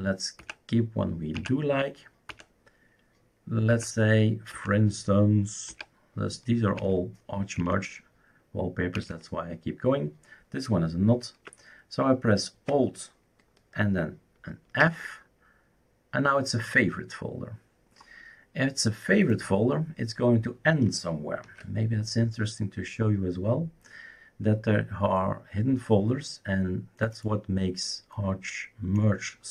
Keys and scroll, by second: 0.4 alt+Right, 1.4 alt+Right, 2.3 alt+Right, 3.7 alt+Right, 4.6 alt+Right, 5.7 alt+Right, 6.8 alt+Right, 7.6 alt+Right, 9.0 alt+Right, 14.8 alt+f, 21.4 ctrl+h.